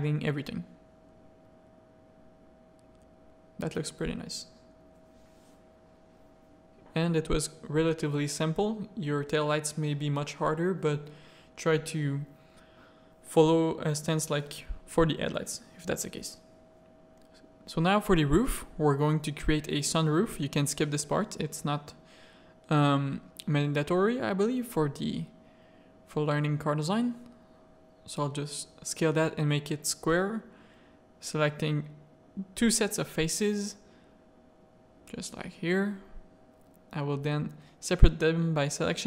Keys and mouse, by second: 0.4 click, 2.0 middle drag, 2.2 click, 3.7 click, 5.5 click, 7.8 middle click, 9.7 middle click, 10.0 click, 15.5 Tab, 15.7 middle click, 16.6 click, 17.5 z, 17.8 shift+middle click, 18.3 s, 20.7 a, 21.2 click, 22.5 click, 23.6 s, 26.7 s, 28.6 click, 28.8 a, 29.0 middle click, 29.3 3, 30.1 click, 31.8 shift+click, 32.9 z, 33.2 middle click, 33.7 z, 34.2-35.4 middle drag, 38.5-39.0 middle drag.